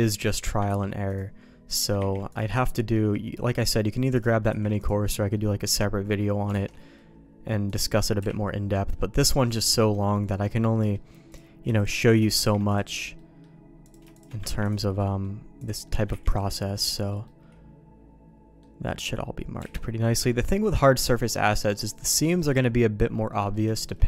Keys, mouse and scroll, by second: 0.1 middle click, 0.7 ctrl+e, 1.7 click, 2.0 ctrl+e, 2.6 shift+middle click, 4.1 click, 4.8 ctrl+e, 5.3 middle click, 5.9 middle click, 6.6 alt+a, 6.8 middle click, 7.7 click, 8.9 KP_Decimal, 9.2 middle click, 10.6 middle click, 11.3 click, 11.8 shift+click, 12.4 ctrl+e, 13.2 middle click, 13.8 click, 14.1 shift+click, 14.5 ctrl+e, 15.0 middle click, 15.6 click, 15.8 middle click, 16.3 ctrl+e, 16.7 middle click, 17.2-18.6 middle drag, 19.7 alt+a, 19.8 middle click, 20.3 shift+middle click, 21.1 middle click, 21.9 middle click, 22.4 middle click, 23.3 middle click, 23.7 shift+middle click.